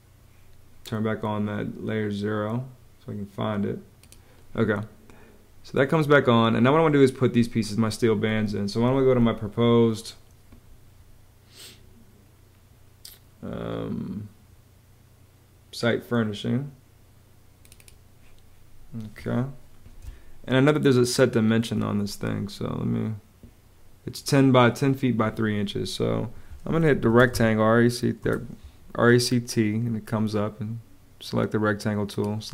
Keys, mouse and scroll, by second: 19.8 space, 26.7 e, 27.0 t, 28.1 Return.